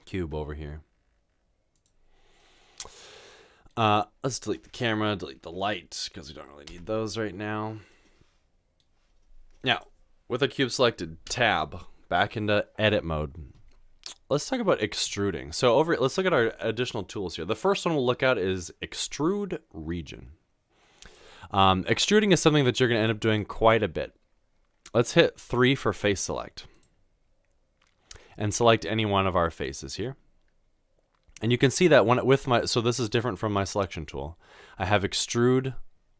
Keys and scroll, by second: 0.2 g, 5.4 Delete, 6.8 Delete, 11.3 Tab, 25.2 3.